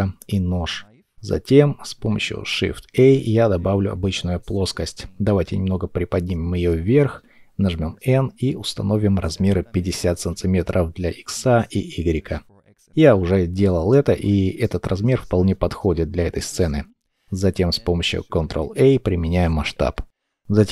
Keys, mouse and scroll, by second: 1.8 shift+middle click, 4.8 scroll down 1, 6.4 shift+middle click, 10.7 KP_5, 11.0 KP_0, 11.3 Return, 18.2 ctrl+a, 20.0 scroll up 1.